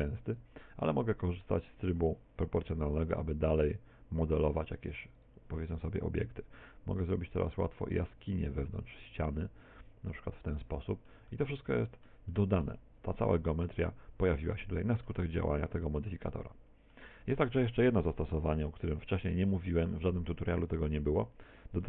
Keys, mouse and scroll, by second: 0.4 right click, 1.0 middle click, 2.7 g, 4.4 click, 5.3 right click, 5.6 g, 6.6 click, 7.2 right click, 8.5 click, 10.4 middle click, 11.2 middle click, 12.2 middle click, 13.7 Tab, 14.5 middle click, 15.4 middle click, 16.5 middle click, 17.3 shift+middle click, 17.9-18.3 scroll down 3, 19.7 x, 20.6 middle click.